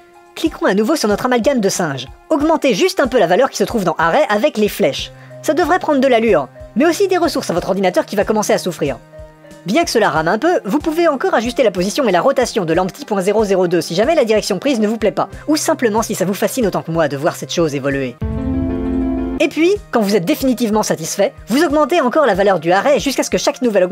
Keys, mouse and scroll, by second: 1.5 click, 4.4 click, 13.3 r, 15.8 r, 19.3 r, 22.0 click, 22.8 click, 23.5 click.